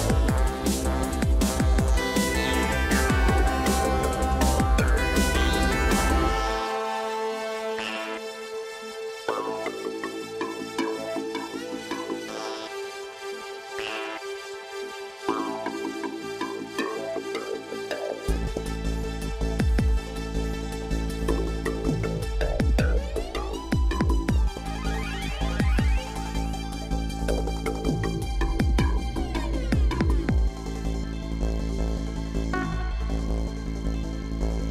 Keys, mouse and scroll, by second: 1.0-3.1 typing, 7.2 double click, 7.8 double click, 8.2 double click, 9.0 double click, 9.4 double click, 10.0-12.8 double click, 27.1 double click.